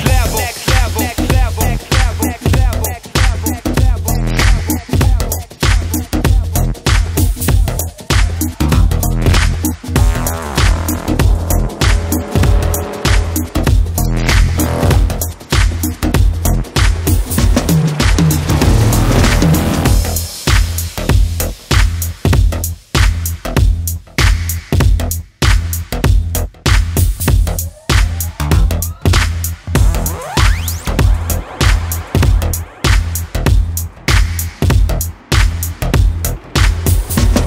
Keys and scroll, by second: 9.1-11.5 typing, 26.1-29.0 [.